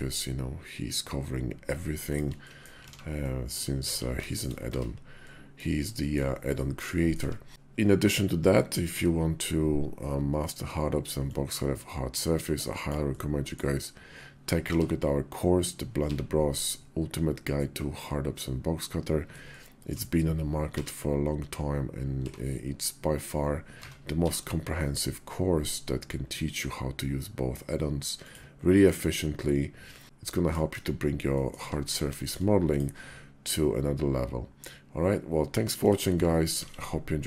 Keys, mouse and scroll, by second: 2.2 click, 2.7 alt+x, 3.0 click, 3.7 alt+x, 4.5 Tab, 4.9-5.4 drag, 5.8 shift+drag, 6.3-7.0 drag, 7.0 `, 7.4 KP_5, 8.7 d, 10.9-20.8 drag, 29.1-30.3 middle drag, 30.0 KP_5, 30.0 `, 30.5 KP_5, 31.1 middle click, 31.2 click, 31.7 KP_5, 32.0 shift+drag, 32.4 click, 33.3-35.7 drag, 36.3 alt+x, 37.2 click.